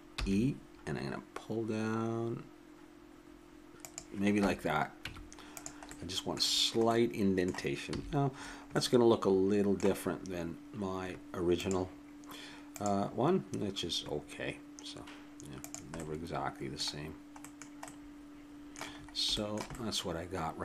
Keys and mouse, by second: 0.2 e, 5.1 Tab, 7.4 middle click, 7.9 a, 17.1-20.6 middle drag.